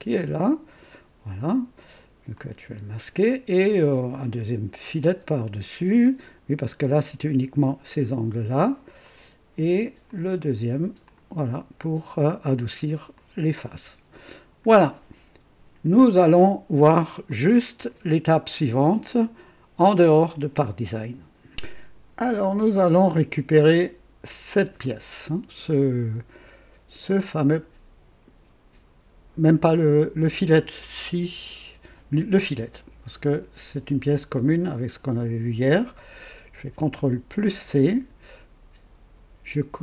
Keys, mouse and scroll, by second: 0.1 space, 2.3 click, 2.6 space, 9.0 click, 9.6-10.4 typing, 10.1 click, 11.1 click, 13.1-14.8 drag, 17.3 click, 24.4 click, 37.4 ctrl+c.